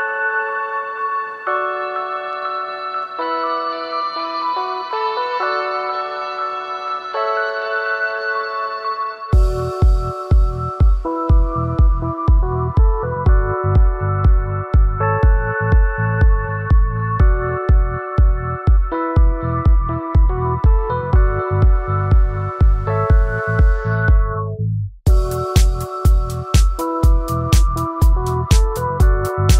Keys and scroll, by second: 22.1 ctrl+q, 22.5 ctrl+-, 22.7 ctrl+™, 23.7 ctrl+‘, 23.9 ctrl+™, 25.3 ctrl+j, 25.8 ctrl+’, 26.3 ctrl+0.